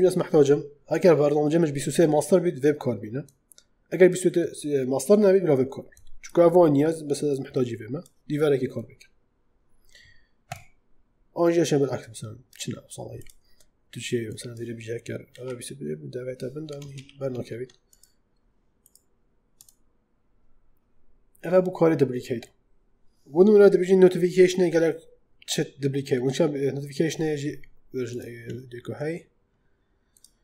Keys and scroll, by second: 15.2 shift+,, 16.8 ctrl+z.